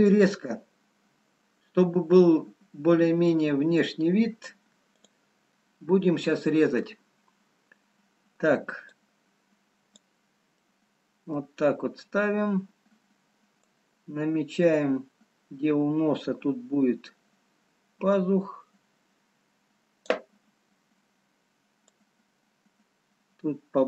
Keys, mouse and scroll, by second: 6.0 click, 6.0 middle click, 10.8 middle click, 22.3 click.